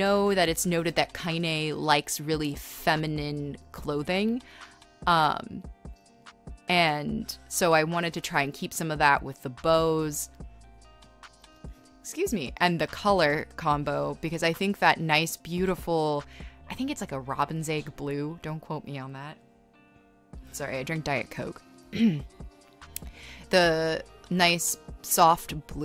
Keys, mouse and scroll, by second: 0.6 right click, 1.1 space, 4.4 scroll, 11.6 right click, 15.1 scroll, 15.3 space, 16.3 e, 16.9 b, 19.4-20.3 typing, 21.5 space, 22.7 ctrl+z, 24.2-25.4 typing.